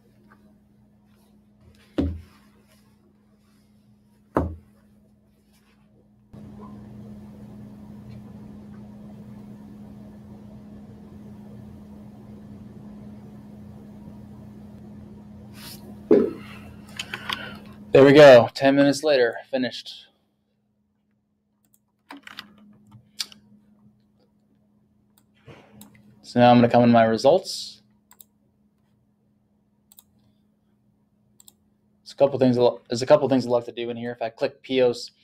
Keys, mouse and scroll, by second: 19.3 click, 25.2 click, 30.0 click.